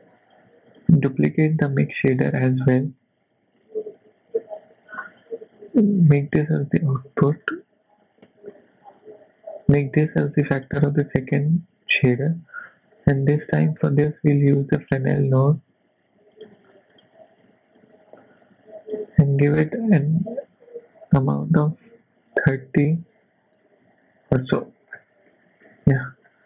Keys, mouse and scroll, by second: 0.7 click, 1.6 shift+d, 2.2 scroll down 2, 2.4 middle click, 2.9 scroll down 2, 3.2 middle click, 3.6 middle click, 5.0 click, 6.8 middle click, 7.4-8.0 scroll up 3, 8.6 click, 11.3 middle click, 12.5 shift+a, 17.8 click, 19.6 click, 24.7-25.3 scroll down 6, 25.3 middle click, 26.2 scroll down 3.